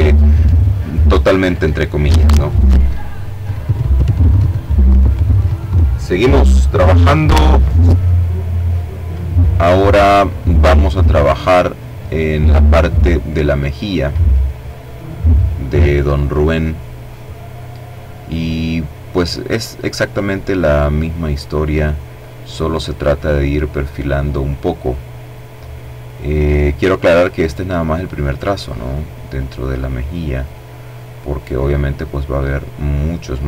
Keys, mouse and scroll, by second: 7.8 middle click, 8.4 click, 8.8 middle click, 9.4-11.4 drag, 11.4 middle click, 15.2 click, 19.4-21.0 drag, 21.6 click, 23.0 click, 23.6 click, 24.2 click, 25.0 click, 25.6 click, 26.8 click, 28.0 click, 28.8 click, 29.5 click, 30.4 click, 31.8-32.8 drag, 33.0 click.